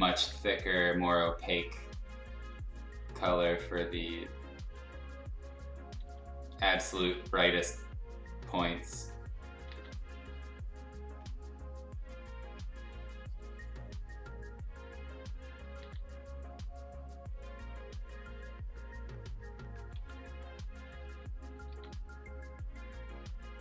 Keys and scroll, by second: 3.7 x, 6.0 x, 6.9 ctrl+z, 9.7 ctrl+z, 15.8 ctrl+z, 19.9 x, 21.7 x.